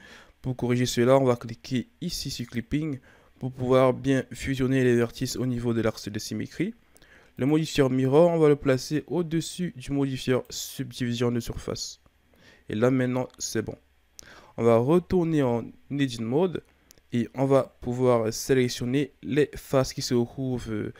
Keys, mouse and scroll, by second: 2.4-4.3 drag, 7.4-12.4 drag, 14.0-14.9 ctrl+scroll down 1, 14.9 Tab, 16.4-17.4 scroll up 2, 17.4 right click.